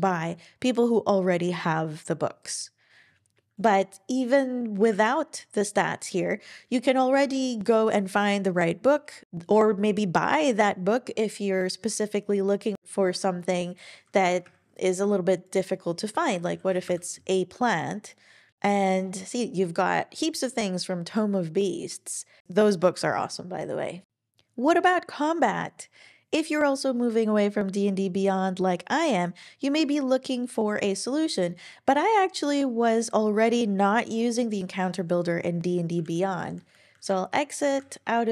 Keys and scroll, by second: 4.8 super+w, 14.4 Page_Down, 16.1-17.2 typing, 36.0 super+w.